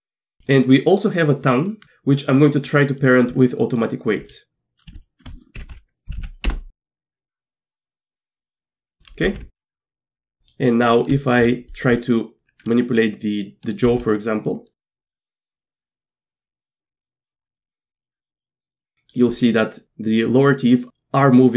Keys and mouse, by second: 0.4 click, 5.6 ctrl+p, 6.2 Down, 7.8 middle click, 8.4 middle click, 8.6 Tab, 9.3 alt+h, 10.2 Tab, 10.5 click, 11.2 shift+middle click, 11.9 middle drag, 14.0 r, 14.8 drag, 15.1 middle click, 15.8 Tab, 15.9 z, 16.3 z, 16.6 middle click, 17.0 middle click, 17.7 shift+middle click, 18.2 middle click.